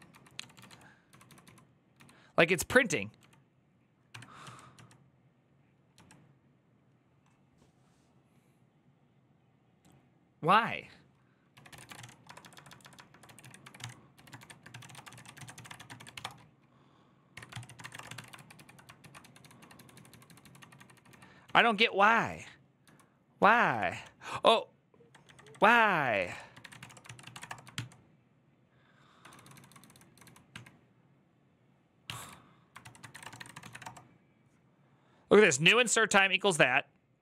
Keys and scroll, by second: 17.1 Tab, 17.1-27.5 typing, 17.3 ctrl+c, 23.6 ctrl+c, 28.8-33.8 typing, 32.6 ctrl+c.